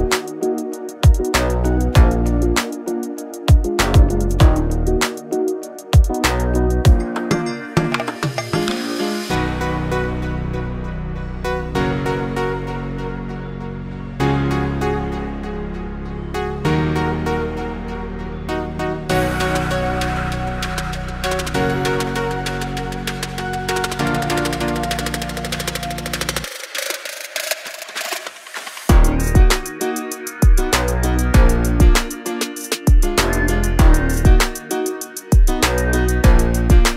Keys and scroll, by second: 2.6 space, 3.2 e, 5.9 space, 7.5 Delete, 8.6 l, 10.2 space, 12.0-14.1 typing, 17.6 space, 18.0 l, 19.6 space, 20.2 e, 24.0 space, 24.3 l, 25.7 space, 27.6 m, 28.7-29.7 typing, 31.2 Delete, 34.2 Delete, 35.8-36.9 typing.